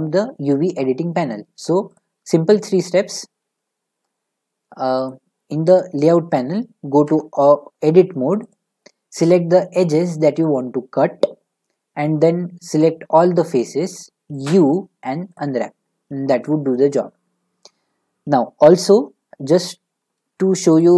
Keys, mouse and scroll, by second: 2.0 click, 5.9-8.5 drag, 7.1 Tab, 13.0 a, 14.4 u, 15.4 click, 20.8-20.9 drag.